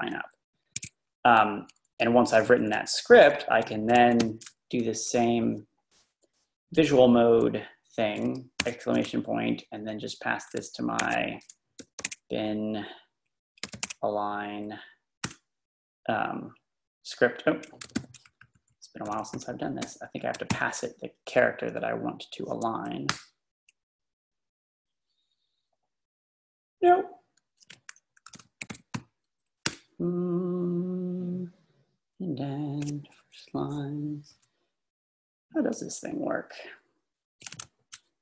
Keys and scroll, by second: 0.8 Escape, 1.0 Down, 1.1 Down, 1.3 Down, 1.5 Down, 1.6 Down, 1.9 Down, 2.1 Down, 2.2 Down, 2.5 Down, 2.7 Right, 4.3 shift+v, 5.0 Down, 8.6 shift+1, 10.8-14.4 typing, 15.3 Return, 18.0 shift+v, 18.4 Down, 18.5 Down, 18.7 Down, 19.3 Up, 19.8 space, 20.5 shift+;, 23.1 Return, 28.1-29.2 typing, 29.7 Return, 34.3 Down, 35.1-36.3 typing, 36.6-37.3 Down.